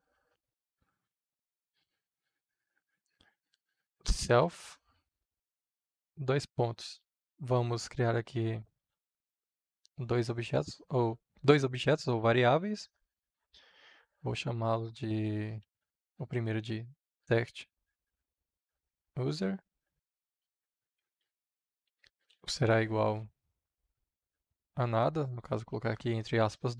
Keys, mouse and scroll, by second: 1.3 s, 2.6 shift+9, 3.7 s, 4.3 l, 4.8 f, 5.2 Right, 6.1 shift+/, 6.9 Return, 7.1 click, 7.3 Return, 8.7 ctrl+z, 14.9-16.2 typing, 17.4-23.1 typing, 20.3 Return, 24.1 Right, 25.3 Return.